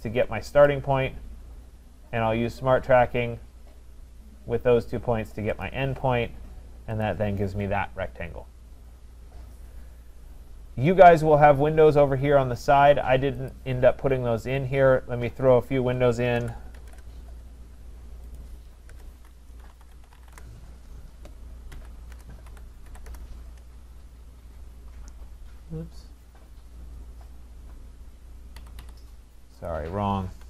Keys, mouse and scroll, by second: 0.7 click, 5.7 click, 7.0 click, 9.9 middle click, 10.5 middle click, 10.6 middle click, 13.5 click, 16.2-17.3 typing, 18.4 click, 18.9 Return, 19.5-23.4 typing, 25.5 typing, 28.6 Escape, 28.8 Escape, 29.7 click, 30.2-30.4 typing.